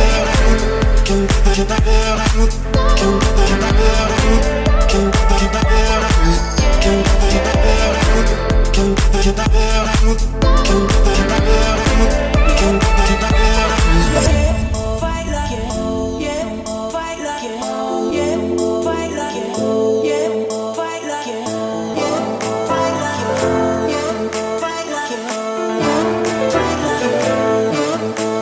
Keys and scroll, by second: 9.5 Escape, 24.0 Return, 24.3 Escape.